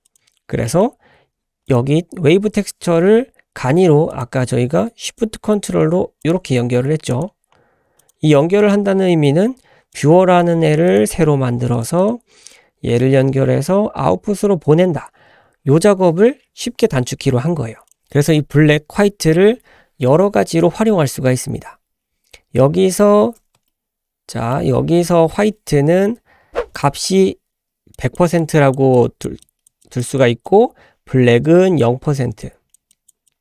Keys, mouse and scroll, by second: 0.1 click, 0.7 middle click, 1.7 click, 4.1 click, 5.1 ctrl+shift+click, 6.2 ctrl+shift+click, 7.1 ctrl+shift+click, 8.0 ctrl+shift+click, 8.7-9.0 scroll down 2, 9.1 middle click, 9.9 click, 10.1 g, 11.7 drag, 12.0 click, 23.7-24.7 shift+middle drag, 26.8 click, 28.0 click, 28.4 click, 29.0 click, 29.4 click, 29.8 click, 30.2 click, 31.4 click, 32.4 click, 32.9 click, 33.3 click.